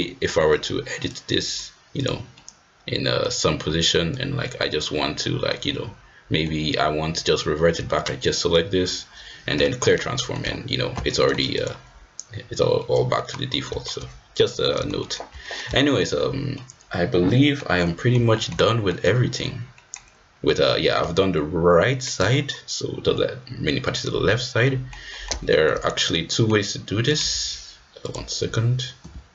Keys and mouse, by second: 1.0 right click, 1.3 click, 1.9-3.1 drag, 3.1 middle click, 4.1 click, 4.9-5.4 middle drag, 5.6-6.4 middle drag, 7.9-9.0 shift+drag, 10.1 middle click, 11.0 middle click, 12.7-13.1 middle drag, 13.6 shift+middle drag, 14.7 shift+middle click, 14.9 shift+middle drag, 15.4 middle click, 15.8 shift+middle drag, 16.5-17.5 middle drag, 17.7-18.1 middle drag, 18.3 shift+middle click, 18.6 middle drag, 19.7 middle drag, 21.3-24.7 drag, 24.7 middle click, 25.1 middle click, 25.5 shift+middle drag, 25.8 middle drag, 26.2 middle drag, 27.0 click, 28.0 click.